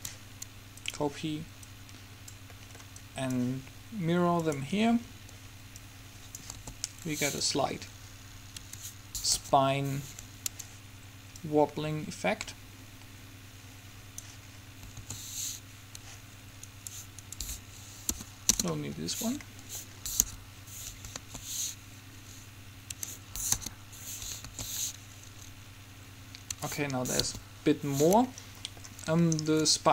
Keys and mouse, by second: 2.6-4.7 middle drag, 5.1-6.6 middle drag, 6.6 alt+a, 8.8 Escape, 9.5 KP_7, 11.6-13.3 drag, 15.1 alt+a, 16.2 Escape, 18.1 Delete, 20.4-21.8 right drag, 20.4 KP_1, 21.4 alt+a, 23.1 Escape, 23.6 KP_3, 24.6 alt+a, 26.6 Escape, 27.4 KP_1.